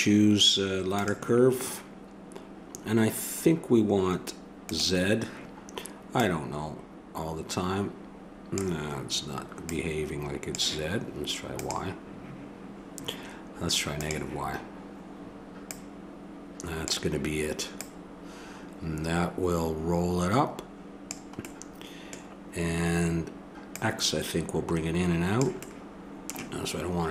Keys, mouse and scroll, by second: 4.6-8.6 drag, 9.6-11.5 drag, 11.6-19.7 drag, 23.7-25.6 drag.